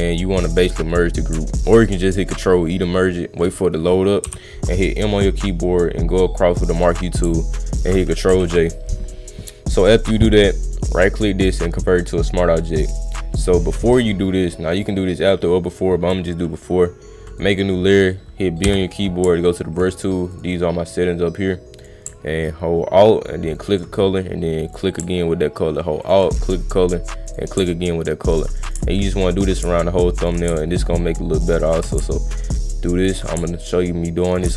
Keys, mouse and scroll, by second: 0.8 click, 5.2-6.9 drag, 11.4 click, 13.1 click, 17.3 click, 20.3 click, 21.8 click, 23.6 alt+click, 24.7 click, 26.0 alt+click, 27.3 click, 28.3 alt+click, 28.6 click, 29.4 alt+click, 29.6 click, 30.2 alt+click, 30.3 click, 31.7 alt+click, 31.9 click, 33.2 click, 34.2 alt+click, 34.4 click, 34.4 right click.